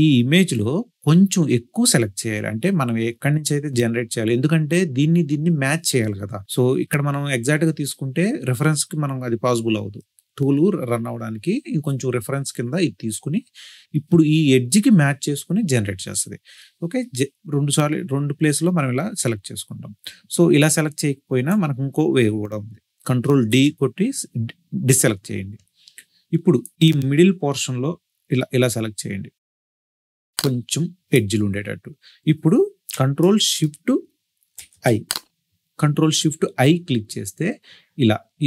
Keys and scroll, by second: 23.3 ctrl+d, 35.5 ctrl+shift+1.